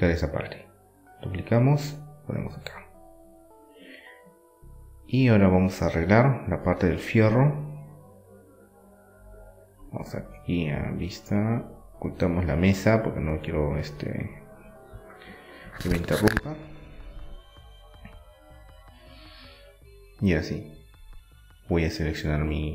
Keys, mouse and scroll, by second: 1.6-3.6 drag, 3.6 middle click, 4.5-5.6 drag, 5.6-7.1 middle drag, 7.1-8.8 drag, 9.1-10.1 middle drag, 10.1 click, 10.2-12.6 right drag, 12.2 click, 12.6-14.2 middle drag, 14.5-16.1 right drag, 15.1-16.1 drag, 16.1 middle click, 16.5 Tab, 17.1 middle click, 18.1-20.9 right drag, 20.8 KP_7, 20.9-21.9 middle drag.